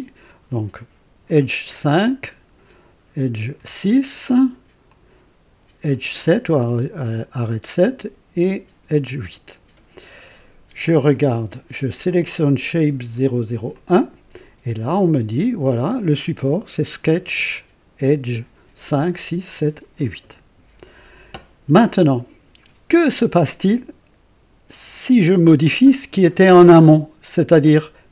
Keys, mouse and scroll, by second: 2.2 click, 4.9 click, 7.8 click, 13.7 click.